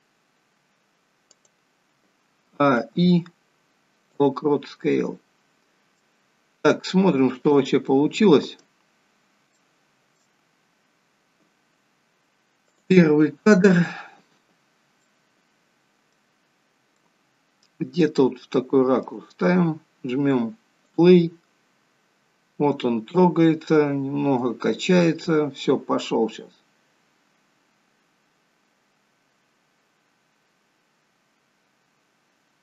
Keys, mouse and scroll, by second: 2.5 a, 3.7 i, 4.9 middle click, 7.5 click, 8.9 scroll up 2, 9.4 shift+middle click, 13.1 click, 14.6 click, 14.6-15.1 scroll down 3, 15.0 middle click, 16.6-16.9 scroll down 1, 16.9 middle click, 18.2 shift+middle click, 20.9 click, 30.0-30.5 scroll up 5.